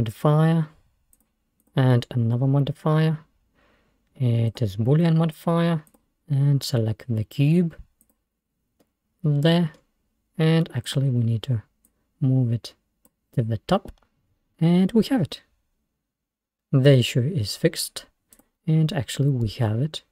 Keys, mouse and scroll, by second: 1.2-4.4 drag, 5.9 click, 8.9-10.9 middle drag, 10.9-13.1 drag, 14.7 scroll up 2, 15.1-17.7 middle drag, 17.7-18.2 scroll down 6, 18.4 click, 18.9-19.2 scroll up 2, 19.2-20.1 middle drag.